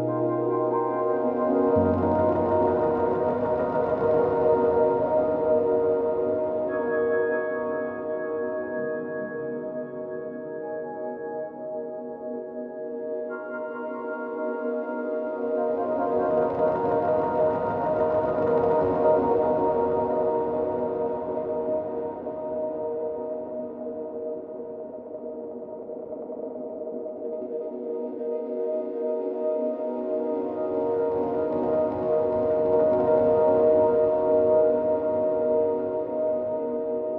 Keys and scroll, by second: 0.5 ctrl+t, 9.3 ctrl+t, 35.0 ctrl+t.